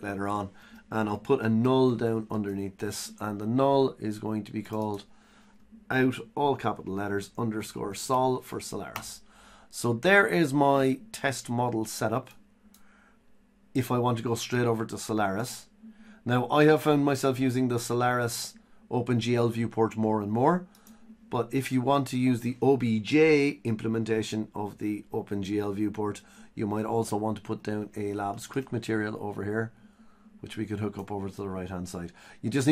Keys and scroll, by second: 1.4 Tab.